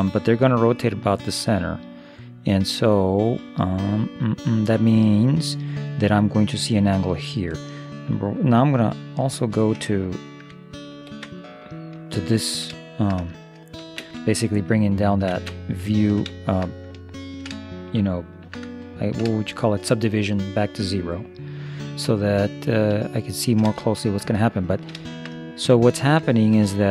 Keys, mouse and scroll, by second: 11.1 ctrl+0, 12.2-13.2 middle drag, 14.0 shift+space, 15.3 shift+space, 15.9 middle click, 19.2-21.2 middle drag, 23.1-26.9 middle drag.